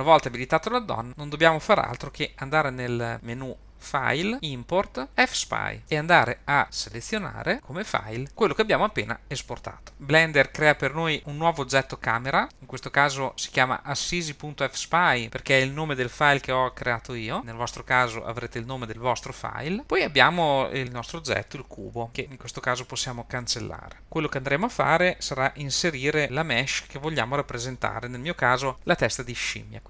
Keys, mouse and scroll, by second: 4.3-10.3 drag, 12.5 scroll up 2, 20.8 click, 24.0 x.